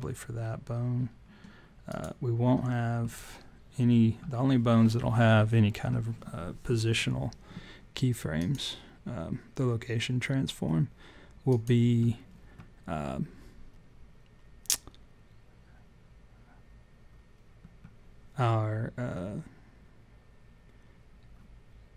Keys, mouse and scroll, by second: 1.8 click, 8.4 click, 11.4 click.